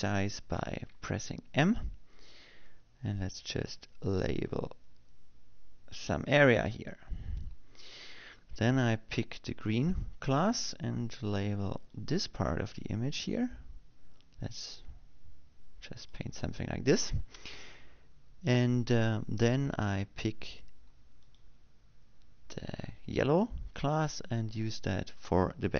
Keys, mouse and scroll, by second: 0.8 m, 2.3 m, 4.8-9.0 drag, 11.3 click, 13.7-18.4 drag, 23.0 click.